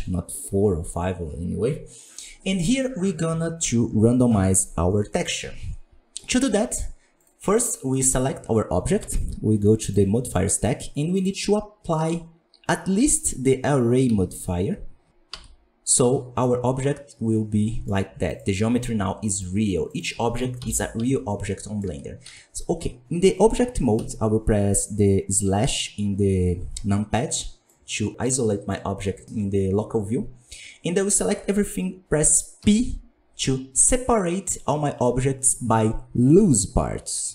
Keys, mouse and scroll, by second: 6.5-7.1 drag, 7.1-7.5 right drag, 7.5-14.1 middle drag, 14.1 ctrl+a, 15.3 Tab, 16.4-17.8 middle drag, 17.8 scroll up 2, 18.2 right click, 19.8 right click, 20.5 ctrl+l, 21.0 Tab, 21.2 scroll down 4, 21.5 middle click, 21.8 Tab, 22.0 scroll up 3, 22.2 a, 23.9 KP_Divide, 27.4 scroll up 2, 27.6-37.3 middle drag.